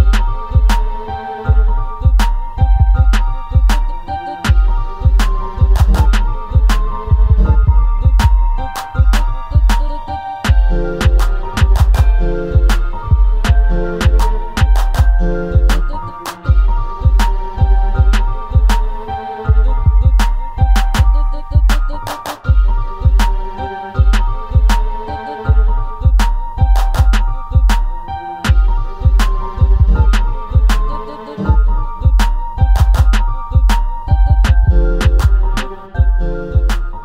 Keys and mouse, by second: 1.2 s, 3.0 click, 3.2-3.7 middle drag, 3.9 drag, 4.1 middle drag, 6.2 drag, 7.2 s, 8.9 click, 10.9 click, 11.9 click, 14.5-14.9 drag, 16.4 g, 17.1 click, 17.6-18.3 middle drag, 21.7 click, 23.9-24.2 middle drag, 24.8-26.6 middle drag, 27.3 middle drag, 28.3-29.8 middle drag, 30.9 middle drag, 31.5-32.1 middle drag, 33.5 middle click, 35.4 click, 36.4 ctrl+z, 36.7 ctrl+z, 36.8 ctrl+z.